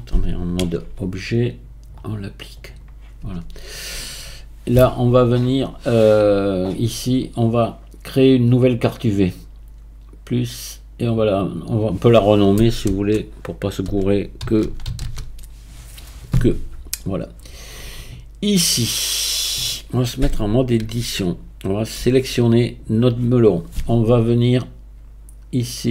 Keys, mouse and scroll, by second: 0.6 Tab, 1.9-3.2 drag, 3.2 Tab, 3.9 Tab, 6.8 click, 7.4-8.7 scroll down 1, 8.7-9.1 drag, 9.1-10.0 scroll down 1, 10.0-10.4 scroll down 2, 10.4-11.4 drag, 11.6-14.7 drag, 18.6-20.2 scroll down 1, 20.2-20.8 scroll down 2, 20.8 Tab, 22.0 a, 24.0-25.4 scroll down 1, 25.4-25.9 scroll down 3.